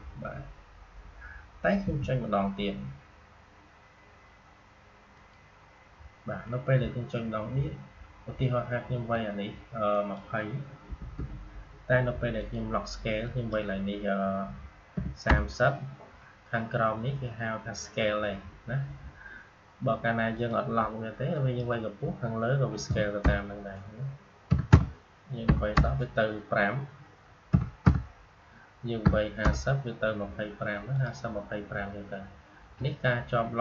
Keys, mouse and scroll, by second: 1.7 m, 5.1 click, 9.8 click, 12.3 click, 20.2 click, 24.4 BackSpace, 27.4 BackSpace, 30.8 click.